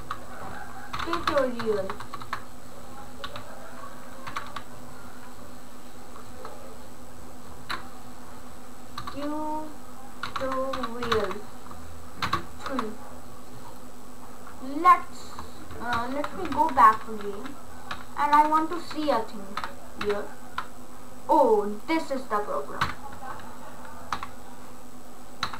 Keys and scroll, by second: 0.0-1.8 typing, 3.3-5.0 typing, 6.4 BackSpace, 9.1 BackSpace, 10.1-12.7 typing, 16.0 ctrl+z, 23.0 /, 24.3 ctrl+z.